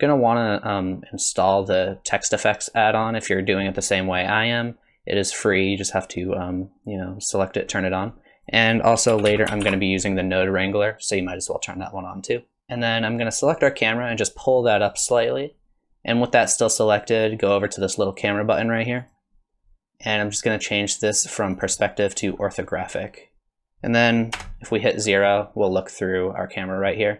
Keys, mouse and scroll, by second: 12.6 click, 13.4 click, 14.1 click, 19.0 click, 21.5 click, 24.3 KP_0.